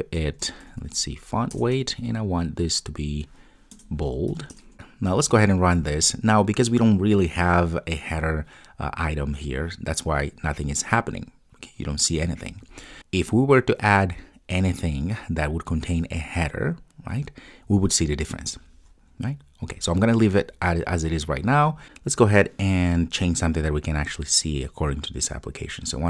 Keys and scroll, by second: 4.7 super+s, 5.1 ctrl+r.